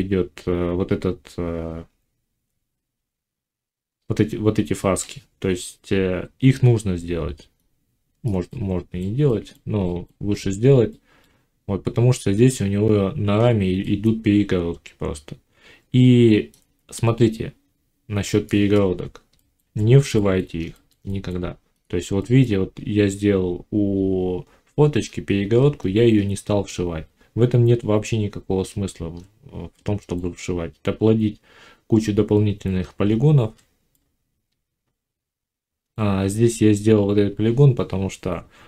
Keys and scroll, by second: 24.9 Tab, 28.4 Tab, 32.6 Tab.